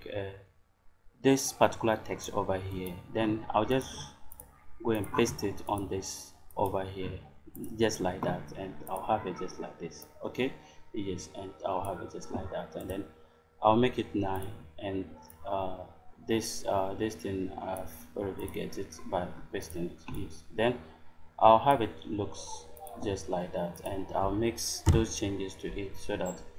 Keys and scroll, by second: 4.3 space, 24.8 BackSpace.